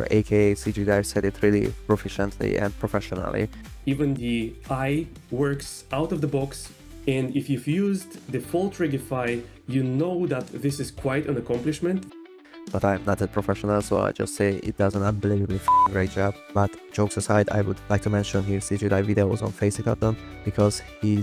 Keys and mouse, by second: 0.1 g, 0.6 click, 0.7 click, 1.2 middle click, 2.0 click, 2.6 g, 3.8 middle click, 12.6 g, 12.6 drag, 13.1 click, 14.4 click, 14.7 g, 15.8 click, 17.4 g, 20.1 click, 20.4 g.